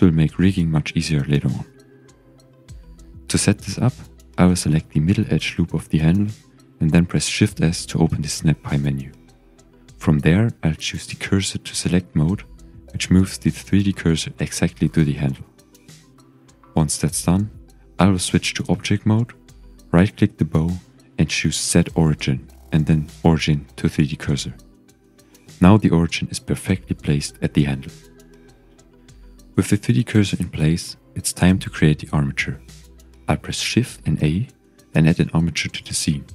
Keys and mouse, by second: 0.3-0.8 shift+drag, 4.1 Tab, 5.1 1, 5.6 shift+click, 6.5 click, 7.1 shift+click, 7.9 shift+s, 12.3 shift+right click, 12.4 shift+middle click, 16.4 Tab, 18.6-19.0 shift+middle drag, 19.4 typing, 19.8-22.0 drag, 27.1-29.3 middle drag, 30.5 ctrl+s, 31.4-31.8 shift+drag, 32.8 shift+a.